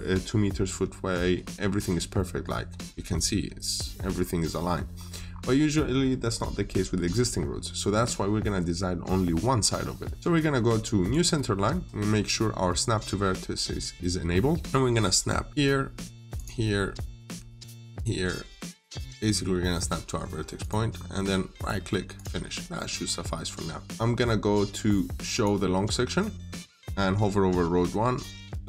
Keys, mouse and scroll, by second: 2.0 middle click, 2.4 scroll down 1, 2.7 middle click, 3.5 scroll down 1, 3.7 middle click, 4.8 scroll up 1, 10.9 click, 14.4-15.5 scroll up 1, 15.5 click, 19.0 middle click, 20.5 click, 20.7 scroll down 1, 21.0 middle click, 21.4 right click, 22.0 click, 23.2 middle click, 25.2 click.